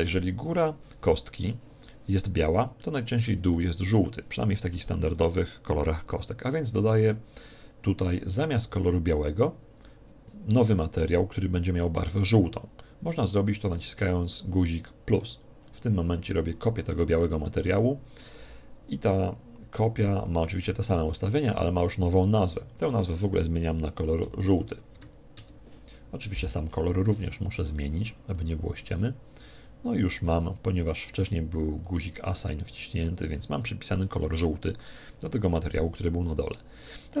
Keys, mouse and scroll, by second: 2.7-6.1 middle drag, 5.1 right click, 8.8 click, 15.3 click, 22.6 click, 27.7 click, 34.0-35.7 middle drag.